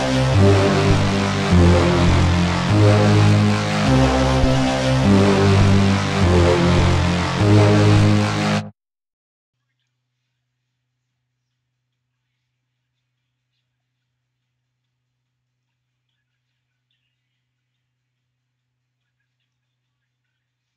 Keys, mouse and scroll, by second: 1.2 click, 6.5 click, 15.4 click, 20.7 click.